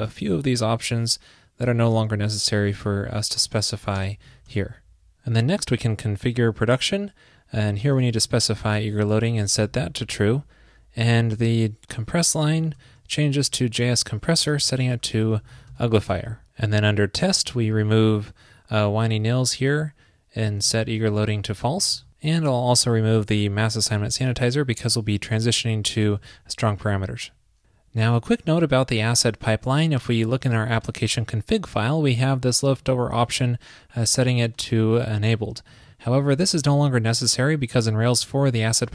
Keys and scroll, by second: 4.6 super+s, 8.2 super+v, 8.8 alt+shift+Left, 13.4 alt+Right, 14.5 alt+shift+Left, 16.1 super+s, 20.7 super+v, 21.0 alt+shift+Left, 22.0 super+s, 26.1 super+s.